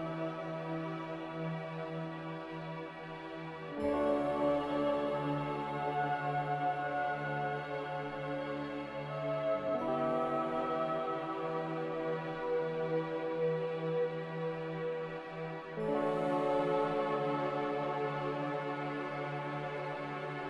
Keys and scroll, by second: 0.6 z, 1.3 Tab, 1.6 Escape, 4.4-5.1 typing, 6.9-7.7 typing, 9.6 a, 11.6-12.8 typing, 15.2 b, 16.2 Delete, 17.3 n, 18.3 ctrl+b.